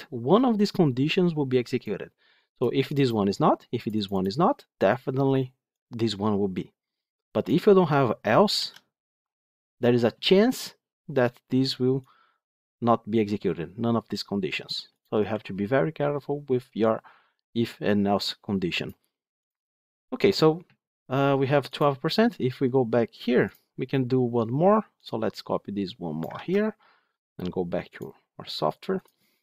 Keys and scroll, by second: 8.5 ctrl+x, 15.2 ctrl+z.